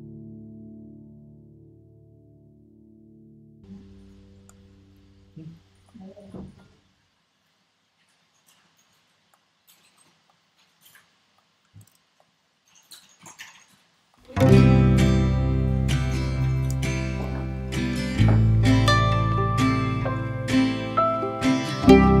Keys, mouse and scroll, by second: 1.8 ctrl+2, 3.6-7.3 drag, 9.3-12.3 drag, 14.2-16.4 drag, 16.7 Tab, 17.7 middle click, 18.3 a, 20.8-22.2 drag.